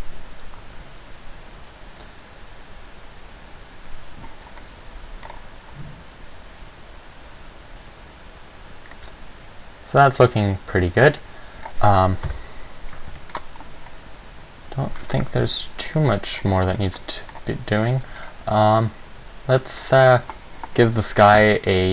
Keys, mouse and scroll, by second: 4.8 middle click, 5.5 scroll up 1, 9.1 middle click, 12.5 KP_0, 13.3 ctrl+s, 21.5 Escape, 21.5 middle click, 21.5 scroll down 2.